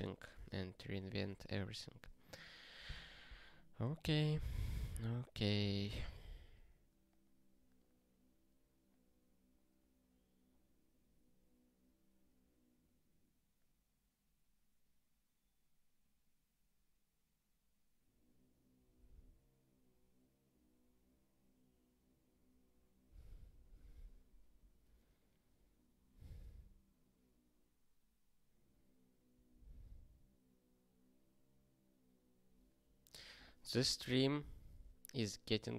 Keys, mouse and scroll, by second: 9.7 scroll down 1, 20.6-21.6 scroll down 1, 22.0 scroll down 1.